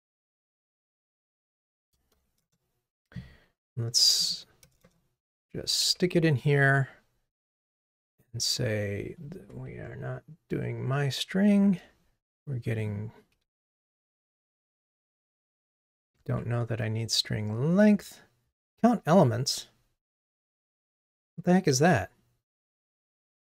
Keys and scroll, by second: 5.9 super+v, 11.5 super+BackSpace, 13.8 super+c, 16.4 super+v.